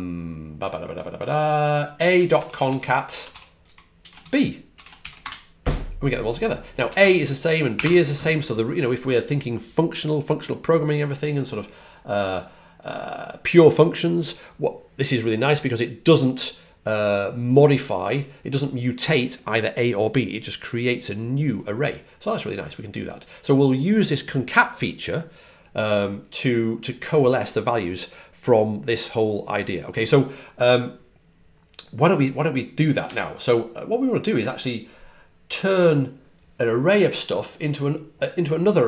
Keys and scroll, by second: 1.6-4.4 typing, 7.6 typing, 33.0 super+Tab.